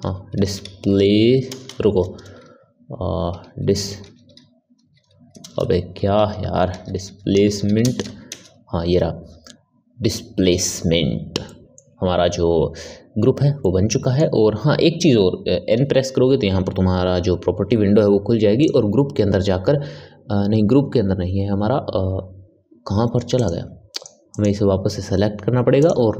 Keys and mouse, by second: 1.5 BackSpace, 1.7 BackSpace, 5.5 BackSpace, 11.4-15.6 middle drag, 15.6 n, 18.5 click, 23.3 click, 23.8 click, 24.2 click, 25.7 click.